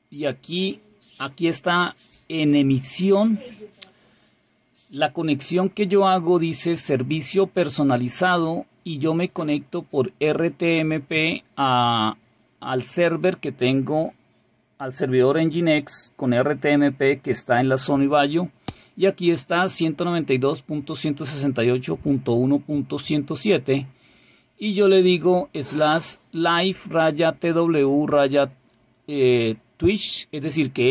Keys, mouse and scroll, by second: 3.0 click, 29.9 click.